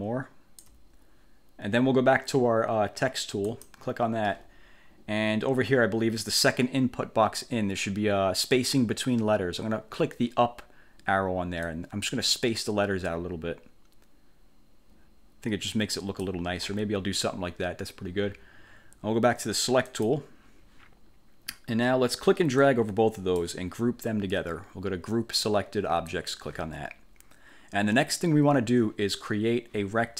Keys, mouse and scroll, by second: 3.6 click, 11.8-16.5 drag, 20.0 click, 22.7 click, 26.2 click.